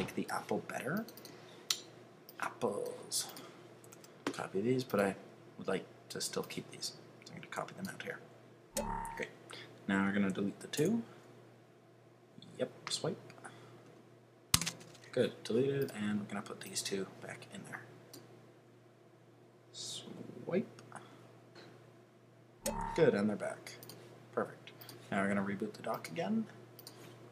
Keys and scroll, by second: 3.9 super+a.